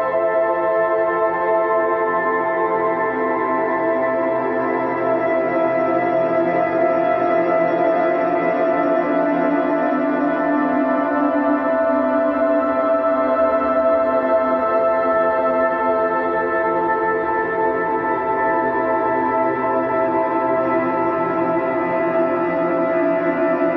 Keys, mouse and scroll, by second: 0.0-1.2 drag, 1.2-2.3 right drag, 2.3-3.9 middle drag, 3.9 s, 7.3-9.2 middle drag, 9.2-9.6 scroll down 1, 9.6-11.4 shift+middle drag, 11.4 shift+a, 13.5 s, 15.5 g, 18.2-19.5 drag, 19.5-20.5 middle drag, 20.5 click, 21.5 s, 23.1 s.